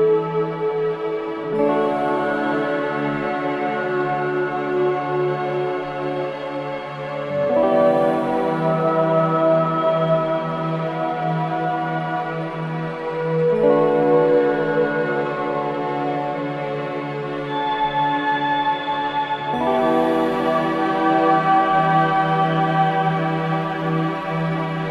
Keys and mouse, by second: 0.7 alt+shift+click, 2.3 click, 2.8 click, 3.3 alt+click, 4.1 ctrl+alt+click, 5.0 click, 5.3-8.7 alt+shift+drag, 8.9 click, 10.0 click, 11.4 click, 12.3 click, 12.7 ctrl+alt+click, 13.8 click, 15.1 click, 16.5 click, 16.7 click, 18.0 ctrl+alt+shift+click, 19.9 click, 21.2 click, 21.9 click, 23.7 click.